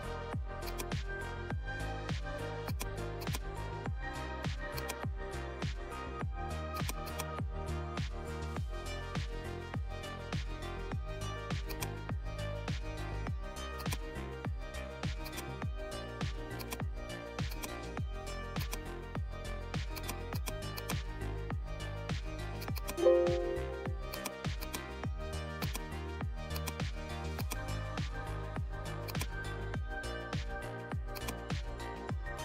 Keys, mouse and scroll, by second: 2.6-4.7 drag, 6.7-9.2 drag, 9.2-9.5 scroll up 1, 11.6 scroll up 1, 11.6 click, 12.7 ctrl+z, 13.7 click, 15.2-22.6 drag, 29.0 click, 31.1-32.4 drag.